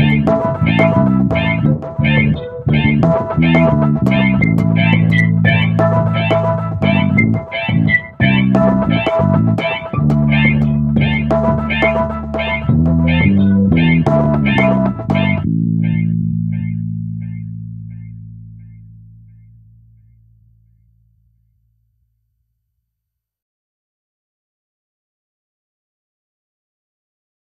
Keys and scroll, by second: 18.9-19.6 typing.